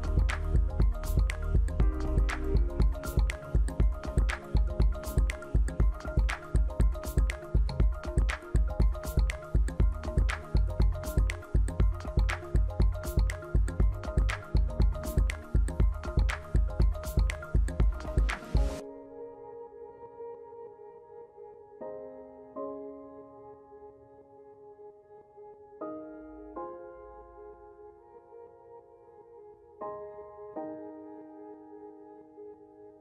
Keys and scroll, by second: 2.3 ctrl+[, 6.5 ctrl+g, 8.2 ctrl+0, 29.6 Down.